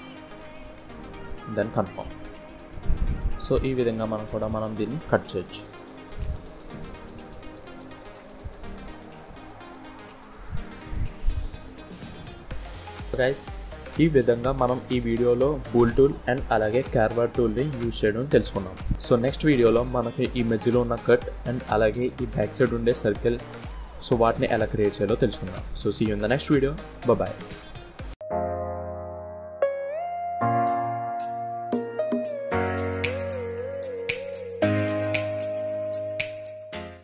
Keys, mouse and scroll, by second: 1.0-1.4 scroll down 6, 1.4 middle click, 3.2-3.7 scroll up 3, 3.7 scroll down 1, 3.8 middle click, 5.0-5.6 scroll down 3, 5.6 middle click, 6.3 shift+middle click, 7.1 scroll up 1, 7.8 middle click, 9.1 middle click, 9.4 Tab, 10.1 middle click, 12.6-13.0 scroll down 1, 13.0 middle click, 13.3 middle click, 18.3 KP_1, 18.9-19.3 scroll up 1.